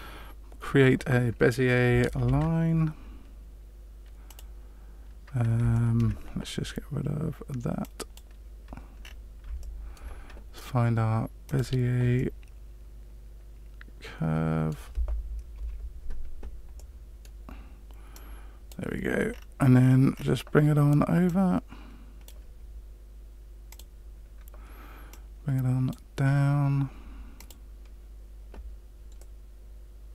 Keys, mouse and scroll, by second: 4.3 shift+a, 5.7 shift+middle click, 7.8 click, 9.0-9.4 scroll down 4, 9.6 shift+middle click, 11.4 click, 12.1 middle click, 15.5 KP_Decimal, 16.7 middle click, 18.1 click, 19.3-21.1 scroll down 7, 21.1 scroll down 1, 21.2 click, 23.6 click, 25.1 click, 27.3 click, 29.1 middle click.